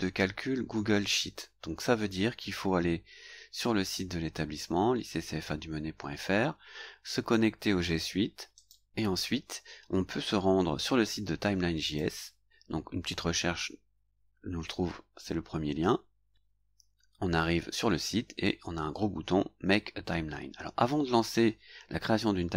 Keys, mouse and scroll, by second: 4.3-4.6 scroll up 2, 5.9 scroll down 1, 8.6 click, 11.8 click, 16.3 click.